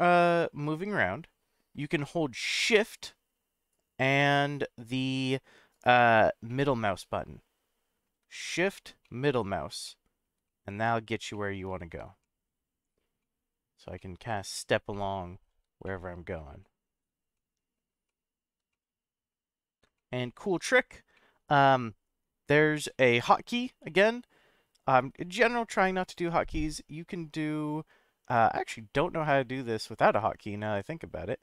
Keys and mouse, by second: 3.7 shift+right click, 5.7 shift+right click, 6.5-8.1 shift+middle drag, 8.3-8.8 middle drag, 9.0-9.6 shift+middle drag, 9.8-10.3 shift+middle drag, 10.4-11.0 middle drag, 11.3-11.9 shift+middle drag, 12.2-12.8 middle drag, 13.2-13.7 shift+middle drag, 13.9-14.6 middle drag, 14.9-15.5 shift+middle drag, 15.8-16.3 middle drag, 16.6-17.0 shift+middle drag, 17.3-17.8 middle drag, 18.0-18.5 shift+middle drag, 18.7-19.3 middle drag, 19.9-20.4 shift+middle drag, 21.1 middle click, 26.0-31.4 drag.